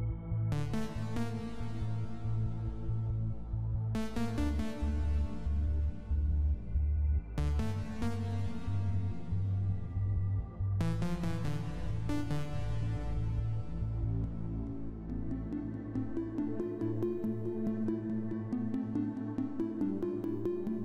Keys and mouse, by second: 0.0 click, 0.5 click, 1.6 click, 2.3 click, 3.0 click, 4.9 click, 6.5 click, 8.0 i, 8.7 i, 9.7 click, 10.4 click, 11.5 click, 12.5 click, 13.5 click, 14.7 click, 15.5 click, 17.4 i, 18.0 i, 18.7 click, 19.5 click, 20.4 click.